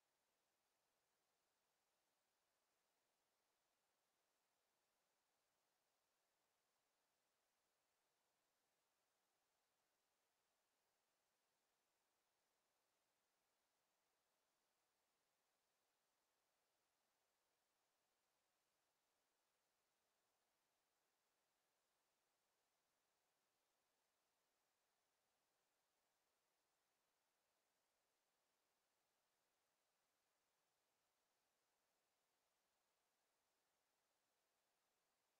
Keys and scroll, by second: 16.7 ctrl+z.